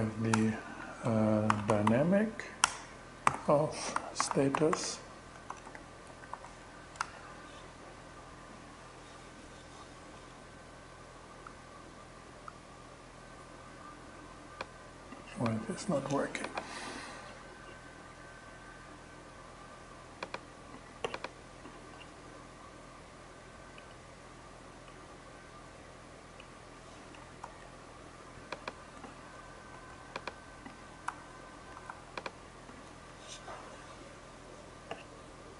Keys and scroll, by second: 0.1 Up, 0.7-1.8 typing, 2.1 Return, 2.7 alt+g, 3.2-6.4 typing, 7.4 shift+Return, 26.9 super+s, 29.2 super+x, 30.5 super+w.